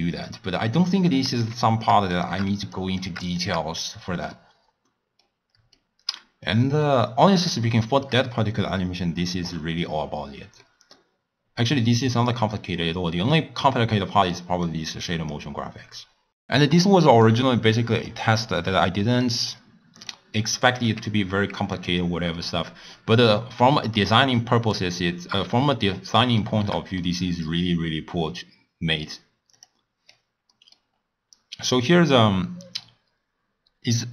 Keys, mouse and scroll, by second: 0.2 click, 0.7 click, 2.1 shift+click, 2.7 drag, 3.0 drag, 3.4 shift+click, 3.7-4.3 scroll up 2, 4.3-6.9 middle drag, 6.9-7.6 scroll up 3, 7.6-11.4 shift+middle drag, 11.4-12.4 scroll down 7, 12.4 middle click, 12.7-13.3 scroll up 3, 13.3 middle click, 13.7-14.2 scroll down 2, 14.6 click, 16.7-17.9 middle drag, 17.9 click, 18.3-20.1 drag, 20.8 g, 22.3 middle click, 22.8-23.2 scroll up 1, 23.2 scroll down 1, 23.5 scroll up 2, 23.5-24.1 scroll down 1, 24.1-24.9 middle drag, 24.9-25.7 scroll up 5, 25.7-29.5 middle drag, 29.5 click, 30.5 middle click, 30.9-34.1 scroll up 4.